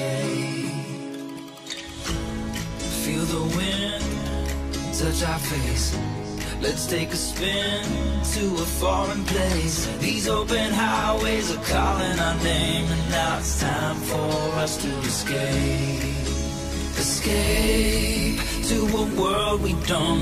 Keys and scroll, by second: 14.6 Tab, 19.7 Return.